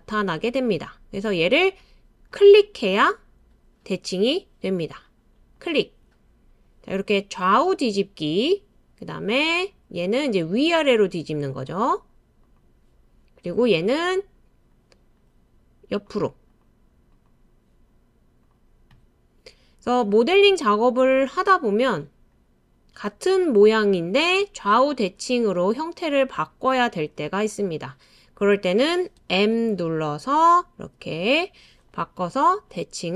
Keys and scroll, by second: 29.2 m.